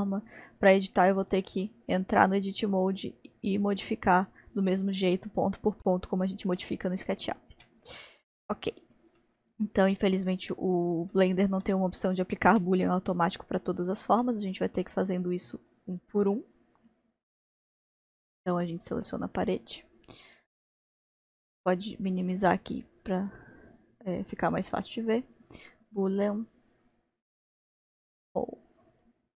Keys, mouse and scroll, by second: 1.2 click, 3.7-4.6 drag, 6.7-10.7 middle drag, 10.7 click, 11.1-17.2 middle drag, 18.8-19.8 drag, 21.6-26.5 drag, 28.9 click.